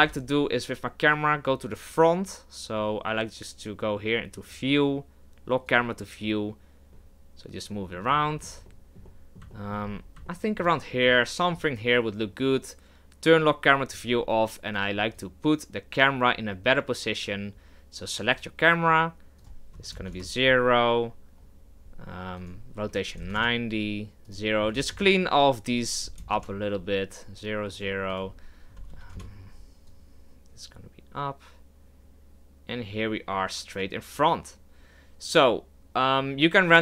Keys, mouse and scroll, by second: 0.0 KP_0, 1.7-5.7 drag, 6.9 KP_0, 6.9-9.8 middle drag, 9.8-10.3 scroll up 3, 10.3-10.7 shift+middle drag, 10.7-11.1 scroll up 1, 11.1-13.9 shift+middle drag, 13.9 click, 18.2 right click, 20.1-34.9 drag.